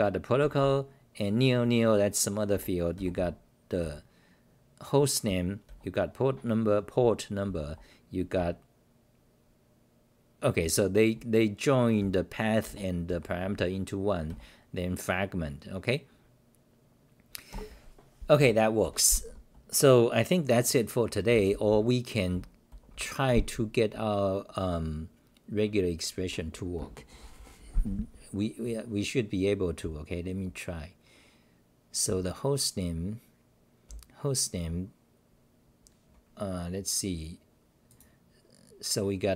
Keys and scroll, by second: 3.6-5.3 typing, 8.3 9, 10.6 h, 11.7-12.6 typing, 17.5 ctrl+g, 18.4 w, 18.9 -, 21.3-23.7 typing, 26.6-27.6 typing, 28.8 n, 29.8 n, 30.1 n, 31.8-32.6 typing, 33.9 n.